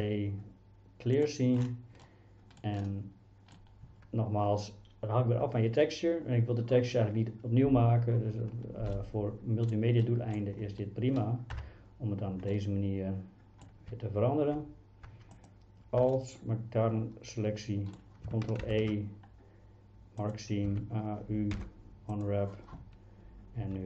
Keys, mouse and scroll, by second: 2.1 middle click, 2.9 middle click, 9.0 middle click, 10.0 middle click, 11.6 KP_1, 12.5-13.7 middle drag, 13.9 z, 16.1-18.0 middle drag, 18.6 ctrl+e, 20.7 a, 21.6 u.